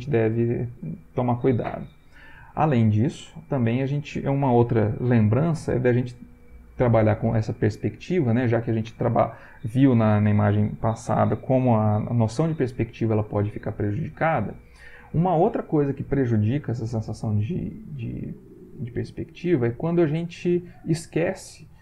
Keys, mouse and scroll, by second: 0.2 Right.